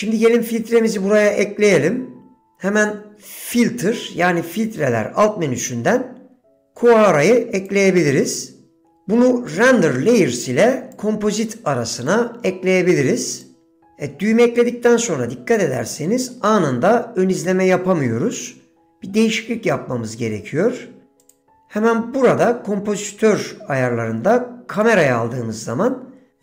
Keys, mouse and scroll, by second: 2.5 s, 9.6-10.3 drag, 11.1-11.7 drag, 12.2-13.6 drag, 21.5-25.8 drag.